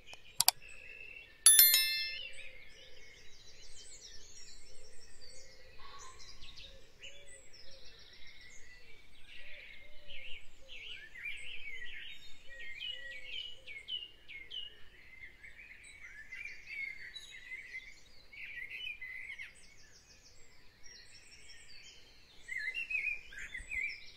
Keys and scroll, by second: 0.1 ctrl+a, 11.3 ctrl+alt+shift+t, 11.9 z.